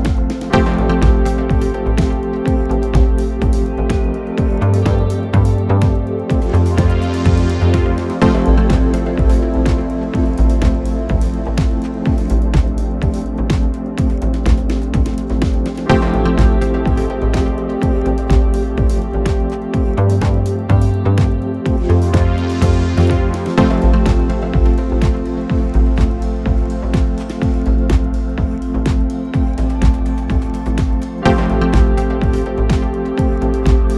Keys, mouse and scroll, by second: 6.7-14.0 drag, 8.3 Left, 8.3 Left, 8.5-9.1 Left, 9.3 Left, 9.5 Left, 9.6 Left, 9.9 Left, 10.0 Left, 10.1 Left, 10.4 Left, 10.6 Left, 10.8 Left, 10.9 Left, 14.4-17.5 middle drag, 18.0 click, 19.0-19.7 scroll down 2, 19.7-22.4 middle drag, 22.4-23.2 drag, 23.2-23.8 middle drag, 23.8-24.3 scroll down 2, 24.3-25.9 middle drag, 25.9-27.2 scroll up 2, 27.2-31.2 shift+middle drag, 31.2 click, 32.5-33.9 drag.